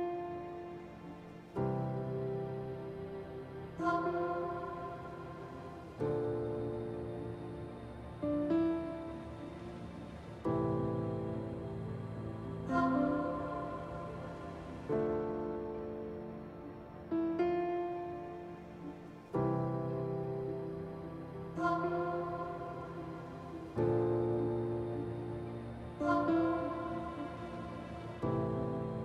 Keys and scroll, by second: 0.0 s, 2.0 q, 7.7 ctrl+z, 16.6 f, 20.7 ctrl+z, 21.1 f, 21.5 ctrl+z.